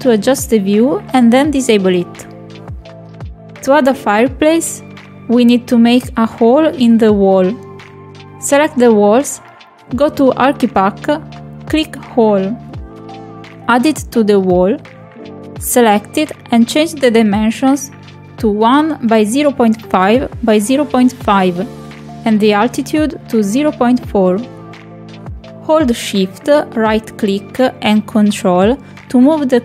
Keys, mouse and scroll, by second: 0.2-0.9 ctrl+middle drag, 1.4 click, 1.5-2.1 ctrl+middle drag, 2.2-2.5 shift+middle drag, 5.1 click, 10.4 click, 13.1 Escape, 14.0 click, 15.7 click, 17.2 click, 18.7 click, 21.8 click, 22.0 click, 22.8 click, 27.6-29.6 ctrl+shift+right drag.